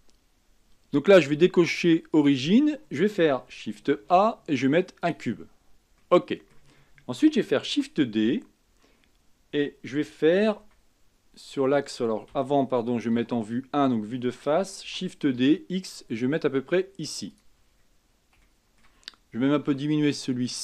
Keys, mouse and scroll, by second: 2.3 click, 4.1 shift+a, 6.2-7.9 middle drag, 7.9 shift+d, 13.3 KP_1, 15.0 shift+d, 17.8-18.3 scroll down 4, 18.6-19.9 shift+middle drag, 19.9 s.